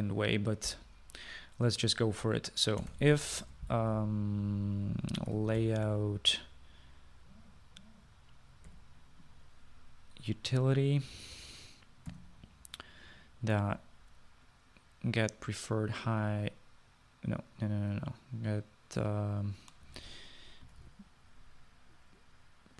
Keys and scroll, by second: 3.7-5.0 typing, 6.2-7.2 typing, 9.8 u, 13.2 ., 20.8-22.4 typing.